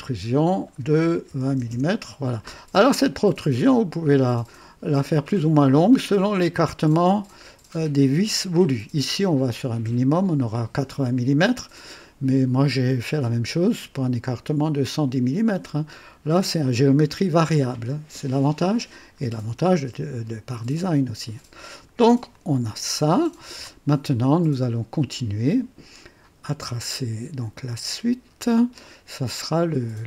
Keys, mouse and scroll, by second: 1.2 KP_2, 1.5 KP_0, 1.7 KP_Enter, 16.3-18.1 drag, 22.3-23.7 drag, 23.9 scroll up 1, 24.3-25.2 right drag, 28.8 click.